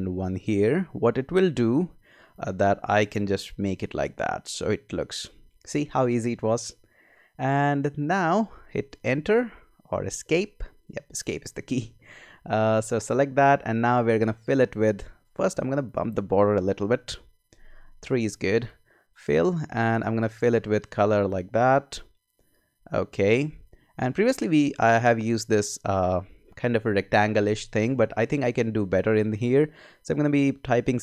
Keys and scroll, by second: 9.0 Return, 10.2 Escape, 16.8 Up.